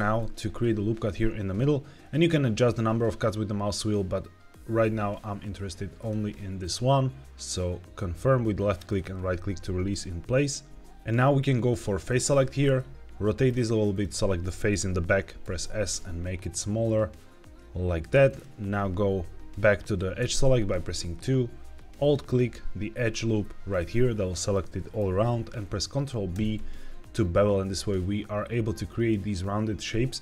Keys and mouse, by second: 12.0 click, 12.6 middle click, 13.8 click, 15.3 s, 18.1 click, 20.1 2, 22.0 alt+click, 22.6 typing, 24.4 middle click, 26.2 ctrl+b.